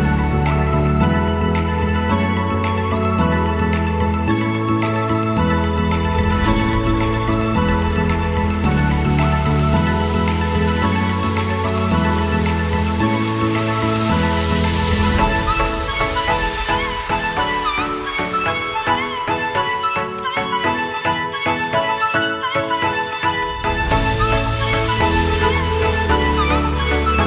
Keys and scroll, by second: 1.3 shift+Home, 2.1 Caps_Lock, 2.5-4.7 typing, 2.9 Return, 6.8 ctrl+k, 22.1 shift+F2, 22.6 Escape, 23.9 KP_Add.